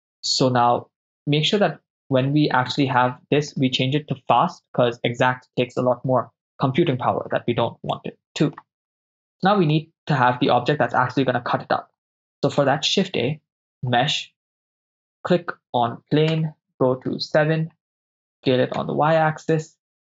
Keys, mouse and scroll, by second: 2.8 right click, 4.4 click, 8.0-8.7 middle drag, 9.8-10.5 ctrl+middle drag, 12.6 shift+a, 16.4 KP_0, 16.9 KP_7, 18.4 s, 18.8 y.